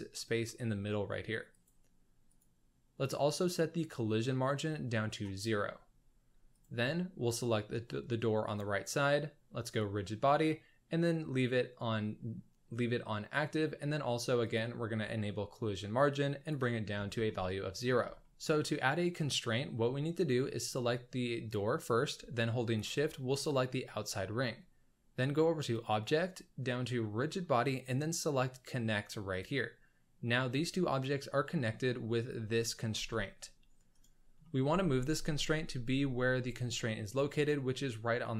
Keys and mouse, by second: 1.5-4.8 drag, 4.8 click, 6.5 click, 9.6-14.4 drag, 14.5 click, 16.1 click, 17.2-17.8 middle drag, 18.2 shift+middle drag, 22.8 shift+click, 25.7-29.4 drag, 32.9 g, 34.4 click, 34.9 g.